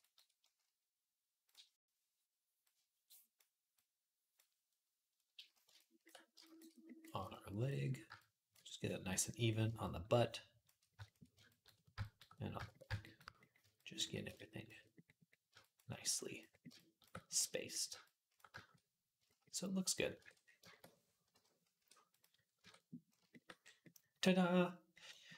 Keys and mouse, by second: 20.0 ctrl+Tab, 21.2 /, 21.6 q, 22.4 Tab.